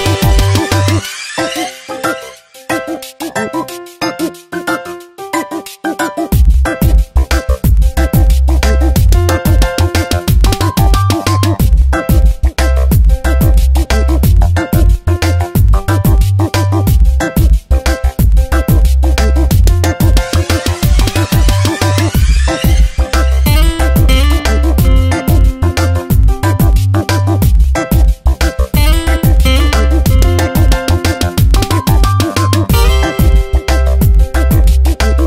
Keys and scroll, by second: 1.7 space, 4.1 space, 6.1 space, 8.5 space, 9.2 v, 11.6 space, 14.5 ctrl+[, 18.7 ctrl+], 19.9 ctrl+t, 22.4 Return, 22.7 v, 23.1 shift+Right, 24.2 Up, 26.6 Tab, 31.2 shift+Down, 32.1 Up, 32.7 Down.